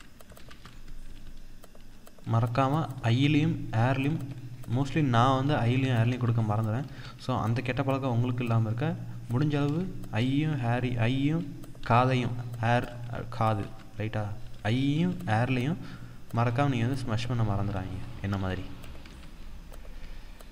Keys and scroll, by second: 2.6 ctrl+=, 3.7 ctrl+-, 7.6 ctrl+-, 12.2 ctrl+-, 13.2 ctrl+=.